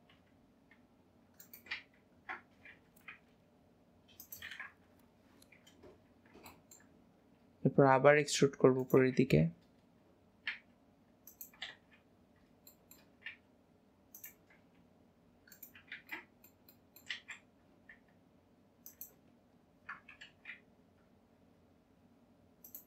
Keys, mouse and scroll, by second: 6.1-6.5 scroll down 2, 6.5 shift+middle click, 7.1-7.8 scroll down 3, 7.8 scroll down 1, 8.1 e, 9.7 scroll up 1, 12.8 middle click, 16.2 ctrl+middle click.